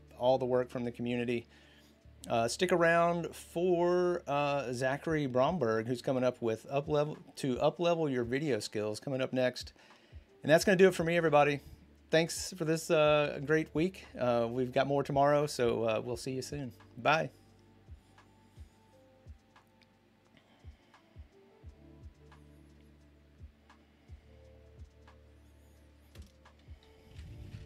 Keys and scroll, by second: 18.4 p.